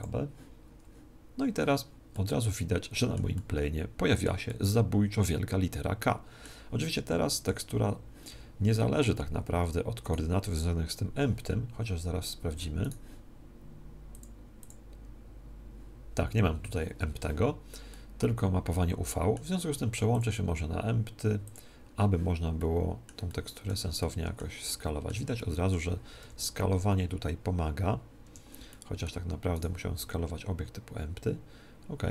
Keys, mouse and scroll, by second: 0.0-1.7 drag, 2.0-6.3 middle drag, 6.8-8.8 middle drag, 10.0-11.8 right drag, 12.8-14.5 right drag, 14.0-16.4 drag, 17.8-19.7 middle drag, 20.0-21.9 drag, 22.5-27.2 middle drag, 26.2 s, 28.6-30.5 middle drag, 29.5-31.4 right drag, 30.0 s.